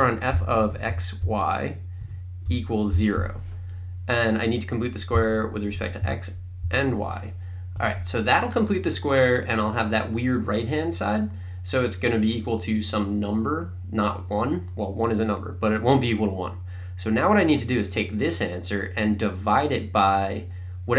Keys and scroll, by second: 0.0-2.9 typing, 2.0 Right, 5.2 ,, 5.7 x, 6.0 ,, 6.6 y, 7.8 Right.